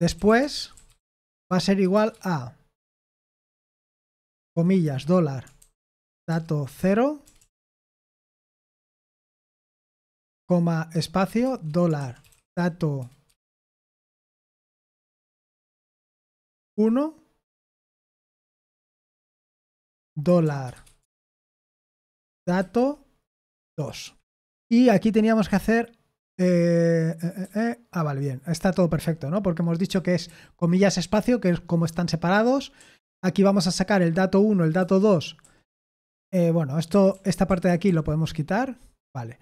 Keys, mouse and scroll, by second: 0.0-2.2 typing, 4.4-8.5 typing, 10.9-13.2 typing, 16.6 typing, 18.8-26.3 typing, 24.0 Escape, 27.4-28.7 typing, 29.9-30.2 typing, 32.7 j, 34.8-35.4 typing, 36.6-38.3 typing.